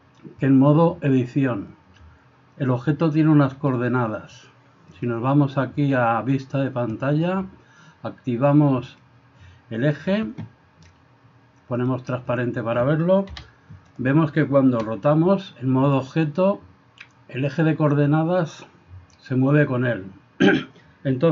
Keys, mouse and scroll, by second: 4.9 click, 6.4 click, 8.9 click, 11.8 click, 12.3 click, 14.8 r.